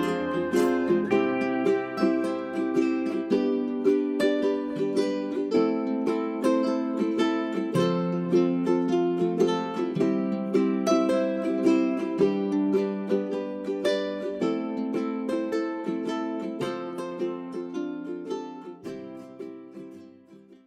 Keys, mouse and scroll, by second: 0.1 scroll up 1, 0.4 click, 1.7-2.1 scroll down 1, 2.1 scroll up 1, 2.4 click, 3.5 click, 3.7-4.1 scroll down 1, 4.1 middle click, 4.7-5.2 scroll up 1, 5.2 click, 6.2 j, 6.7 click, 7.9 scroll down 1, 8.2 click, 8.6 middle click, 8.8-9.3 scroll down 1, 9.6 middle click, 9.9-10.6 scroll up 1, 10.6 middle click, 10.7 scroll up 1, 11.0 middle click, 11.4 click, 14.7-15.3 scroll down 1, 15.3 scroll up 1, 15.7 middle click, 15.9-16.5 scroll down 1, 17.5 click.